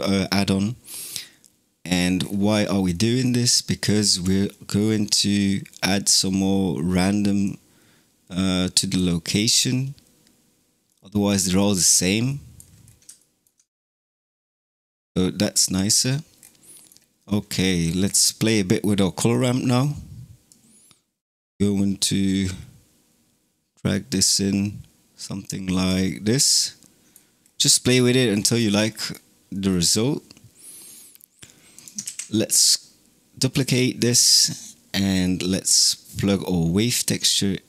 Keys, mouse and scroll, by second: 2.1-2.8 scroll down 7, 2.8 middle click, 3.5 click, 4.3-4.8 middle drag, 4.8 scroll up 3, 7.3 click, 9.3 click, 10.7-11.7 middle drag, 11.7 scroll down 3, 12.1-12.7 middle drag, 12.7 scroll down 2, 13.0 shift+middle click, 13.5-14.2 scroll down 2, 14.2-15.1 scroll up 4, 15.6 middle click, 16.2-16.6 scroll down 4, 16.6-17.1 middle drag, 17.1-17.5 scroll up 5, 17.5-17.9 middle drag, 17.9-18.5 scroll up 4, 18.5-19.3 middle drag, 19.3-20.3 scroll up 1, 20.3-23.5 drag, 26.1 scroll down 3, 26.5-27.3 middle drag, 27.3-28.1 scroll down 2, 28.1-28.7 scroll down 11, 28.7-31.6 middle drag, 31.6 click, 31.9 shift+d, 33.8 middle click, 34.4-34.9 scroll up 3, 34.9-37.0 middle drag, 37.0 click.